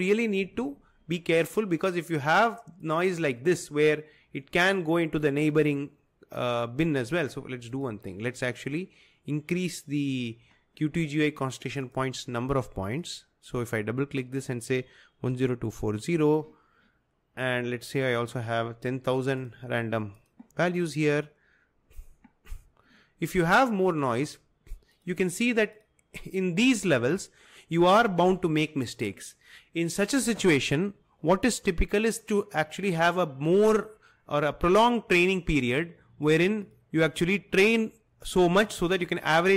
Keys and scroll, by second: 15.4 0, 19.6 0.